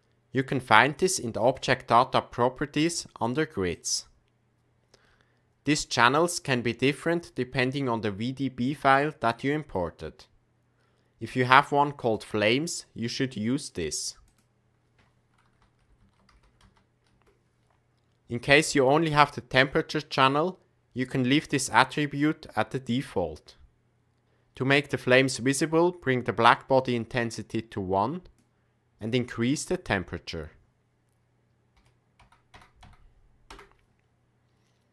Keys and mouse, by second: 1.4 click, 3.8 click, 12.0 click, 14.4-17.9 drag, 27.1-28.4 drag, 29.4-34.9 drag, 32.5 KP_0.